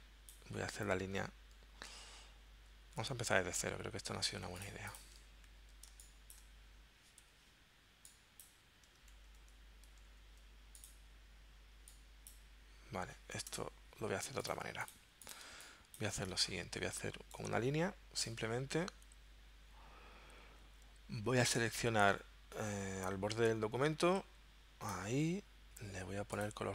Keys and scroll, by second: 3.0 super+z, 4.3 z, 5.4 super+z, 6.0 space, 7.2 v, 9.1 super+z, 10.1 super+z, 13.5 BackSpace, 14.3 z, 15.4 space.